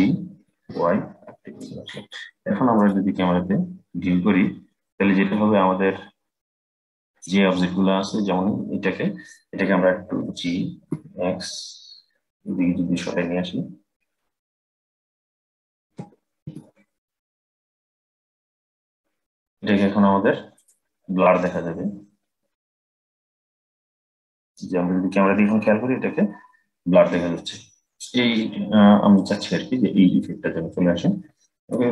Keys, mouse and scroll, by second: 2.5 click, 3.7-4.5 scroll up 4, 4.5-5.5 scroll up 2, 5.5-7.6 scroll up 1, 10.0 g, 15.5 g, 20.3 click, 21.4 scroll down 2, 22.5 click, 23.6-24.5 scroll up 4, 24.5-25.9 scroll down 2, 25.9-27.6 scroll down 1, 27.6-28.9 scroll down 3, 28.9-31.9 middle drag.